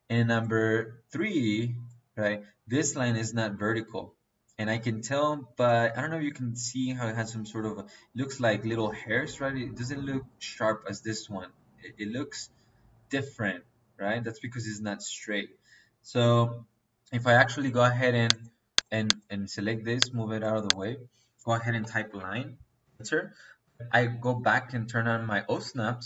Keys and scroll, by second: 21.7-22.7 typing.